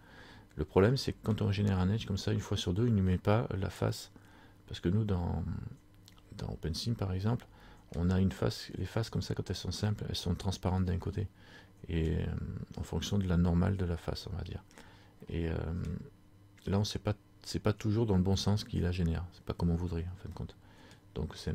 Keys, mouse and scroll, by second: 0.9 scroll up 1, 1.0 middle click, 4.1 middle click, 11.2 middle click, 15.3 middle click, 20.5 middle click.